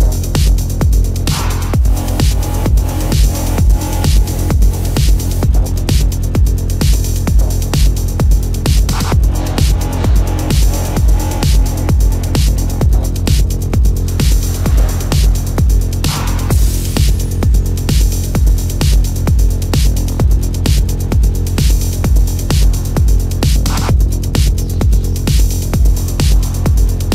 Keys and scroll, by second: 1.2 ctrl+alt+z, 2.0 ctrl+alt+z, 2.1 ctrl+=, 2.6 space, 5.6 space, 10.1 ctrl+-, 11.1 ctrl+alt+z, 12.0 ctrl+alt+z, 13.1 ctrl+-, 15.3 ctrl+=, 15.6 space, 16.0 ctrl+-, 16.3 c, 17.1 ctrl+alt+z, 17.9 ], 19.5 space, 20.9 ctrl+-, 21.6 space, 22.5 ctrl+-, 23.0 ctrl+-, 23.7 space, 24.4 ], 25.4 ctrl+alt+z, 26.4 ctrl+alt+z, 27.0 ctrl+alt+z.